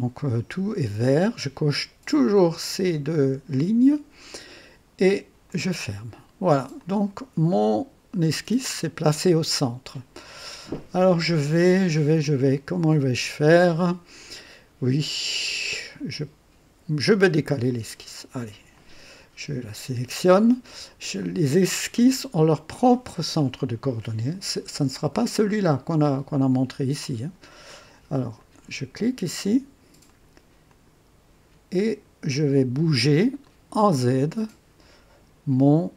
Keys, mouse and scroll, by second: 2.6 click, 5.4 click, 6.7-10.7 drag, 11.2-17.6 drag, 18.6 click, 21.1 click, 21.9-22.8 right drag, 28.3 click, 30.0 click, 30.6 click, 33.3 click.